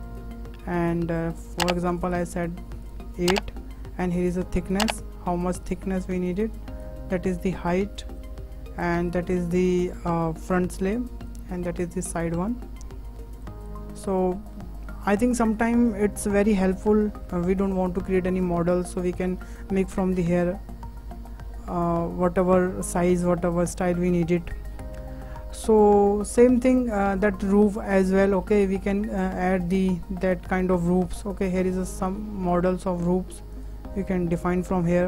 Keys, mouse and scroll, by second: 6.8-8.2 drag, 8.8-11.2 drag, 11.7-13.6 drag, 14.0 scroll down 2, 14.2-14.5 middle drag, 14.5-15.0 scroll up 3, 15.0-15.3 middle drag, 15.3-15.7 scroll up 2, 15.7-16.8 shift+middle drag, 16.8 scroll down 1, 17.1 shift+middle drag, 17.3 scroll up 4, 17.6-18.0 scroll down 4, 18.0-18.4 shift+middle drag, 18.4 click, 19.1 click, 19.9-21.5 shift+middle drag, 21.5 Delete, 22.0-22.6 scroll up 2, 22.6-23.1 shift+middle drag, 23.1-24.2 scroll down 2, 24.2-25.8 scroll up 1, 25.8-26.4 scroll up 1, 26.4-27.2 scroll up 1, 27.2-27.9 drag, 27.9-28.3 scroll up 4, 28.3 shift+middle click, 29.2-29.6 scroll up 4, 29.6-30.0 middle drag, 30.0 scroll down 3, 30.8 scroll down 1, 31.1-35.0 drag.